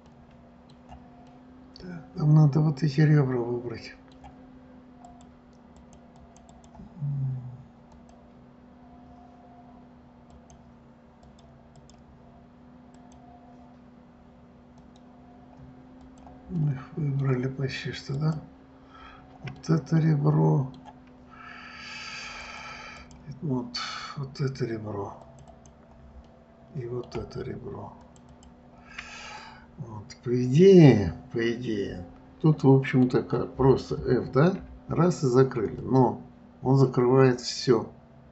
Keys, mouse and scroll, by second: 0.4-4.6 middle drag, 5.4 click, 6.1 click, 6.5 click, 6.9 click, 8.3 click, 10.7 click, 11.6-13.5 drag, 15.1 click, 16.4 click, 16.9-18.5 middle drag, 18.5 click, 19.9-22.8 middle drag, 22.8-25.7 drag, 25.9 click, 26.6-28.4 middle drag, 28.4 shift+click, 28.7 shift+click, 29.5-32.6 middle drag, 36.2-38.3 middle drag.